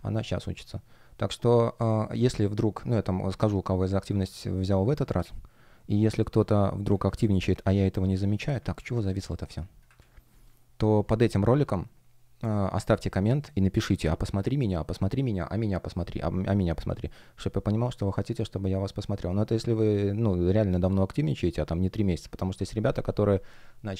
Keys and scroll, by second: 6.0 F1, 9.9 super+r.